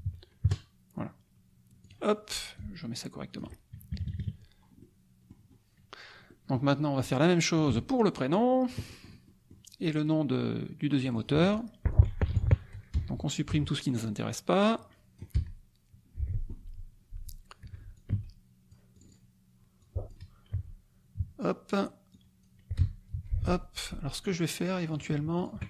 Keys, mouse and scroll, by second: 0.4 ctrl+KP_Enter, 1.8 click, 2.5 ctrl+click, 3.9 ctrl+KP_Subtract, 4.8 click, 6.3 click, 7.0 click, 7.5-8.9 drag, 7.7 space, 9.1 click, 11.1 click, 11.9 click, 12.9 BackSpace, 13.5 Delete, 14.6 click, 15.4 BackSpace, 17.6 F1, 17.9 click, 18.1 space, 19.0 click, 19.8 click, 20.5 Delete, 21.9 Delete, 22.1 click, 22.8 BackSpace, 24.2 click, 24.9 shift+click, 25.5 shift+click.